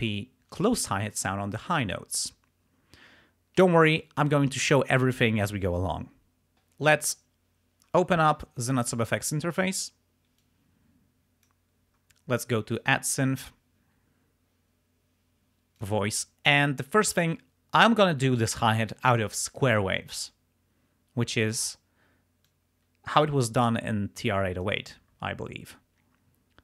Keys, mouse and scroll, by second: 8.7 click, 10.4-11.6 drag, 12.7 click, 15.8 click, 21.5 click, 22.5-24.9 drag.